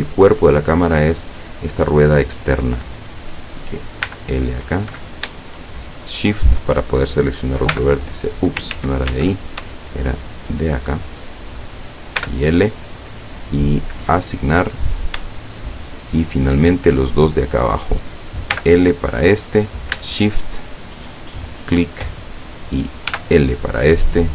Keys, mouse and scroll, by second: 3.3 right click, 4.1 l, 5.9 shift+right click, 7.8 l, 8.8 ctrl+z, 9.7 ctrl+shift+z, 10.5 shift+right click, 12.2 l, 14.0 click, 15.5-16.8 shift+middle drag, 17.7 right click, 18.6 l, 21.0 shift+right click, 23.2 l.